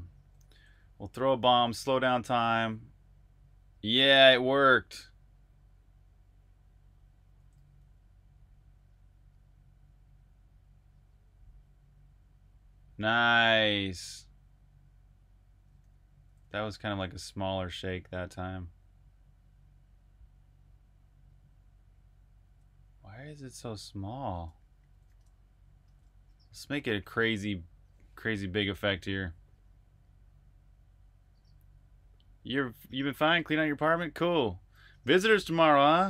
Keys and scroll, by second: 0.0-2.4 typing, 4.0-4.7 typing, 7.3 s, 15.3-17.3 typing, 22.4-22.9 typing, 24.3-25.1 typing, 25.8 super+q.